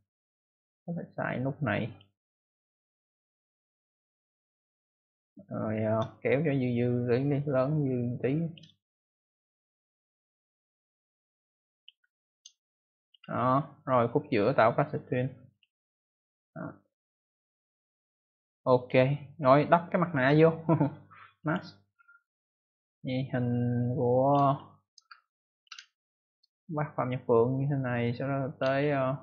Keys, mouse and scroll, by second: 0.5 click, 1.8 click, 3.7 click, 6.0 shift+click, 9.6 click, 12.1-12.6 scroll down 1, 12.6 space, 12.7 click, 13.1 space, 13.7 click, 14.2 right click, 15.4 click, 16.2 click, 19.6 right click, 21.3 click, 22.4 click, 24.5 ctrl+scroll up 1, 25.0 space, 25.3 click, 25.5 space, 25.5 space, 25.8-26.8 ctrl+scroll up 1, 27.5 click, 28.8-29.2 scroll down 1.